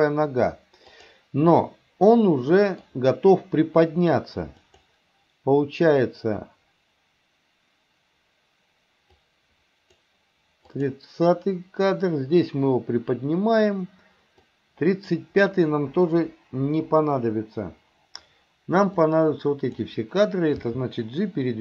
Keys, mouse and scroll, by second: 1.0 click, 1.6-2.9 middle drag, 4.7 click, 9.2 click, 10.8 click, 14.4-15.1 drag, 16.3 Delete, 19.0 click, 20.7 g.